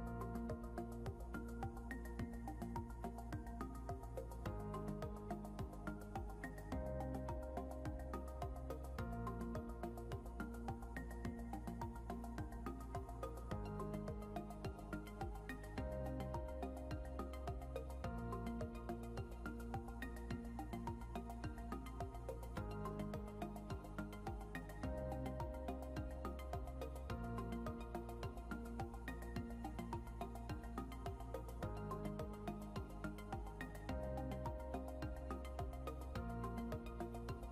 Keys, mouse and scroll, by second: 7.3 click, 31.7 click.